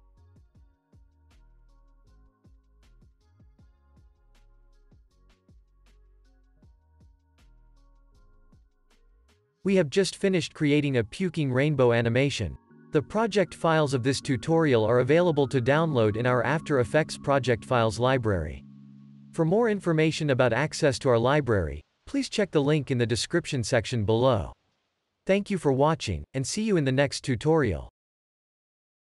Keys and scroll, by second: 6.0 F9, 6.9 ctrl+s, 7.6 space, 8.3 Home, 8.8 space.